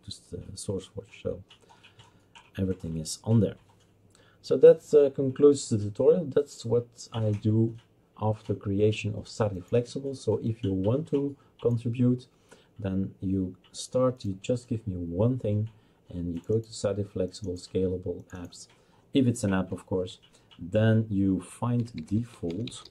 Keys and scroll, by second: 21.6-22.9 typing.